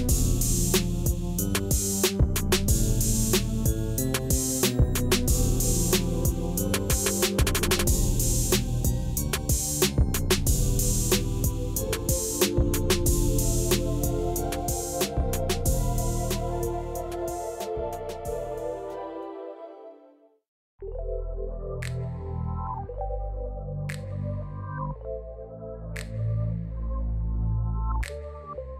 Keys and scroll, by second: 1.8 Tab, 2.6 alt+a, 4.7 Tab, 5.6 ctrl+r, 7.9 Tab, 11.5 Tab, 12.4 3, 13.9 i, 18.8 Tab, 19.4 alt+a, 21.6 Tab, 24.7 i, 27.2 Tab.